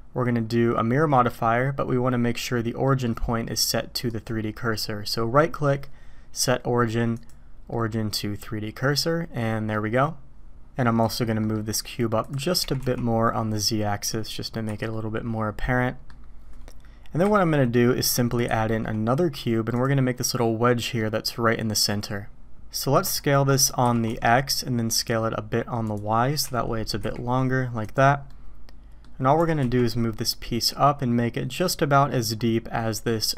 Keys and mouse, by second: 2.8 middle drag, 4.1-7.2 right drag, 7.7-9.7 middle drag, 11.0 click, 11.4 middle click, 12.6 g, 14.7 h, 14.9-16.1 middle drag, 17.2 KP_7, 18.4 shift+a, 20.9 click, 23.8 s, 26.4 s, 28.3-29.0 drag, 29.4 g.